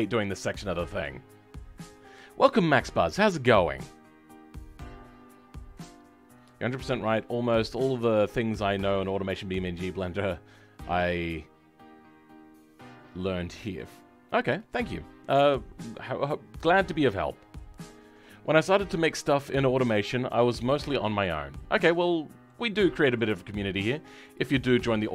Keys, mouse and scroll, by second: 21.4-21.9 scroll up 2, 21.9-25.1 shift+middle drag.